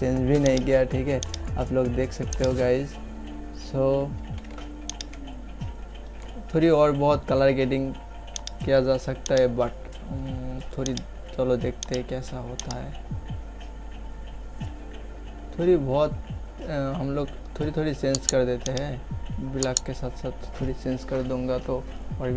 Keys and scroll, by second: 4.4 ctrl+z.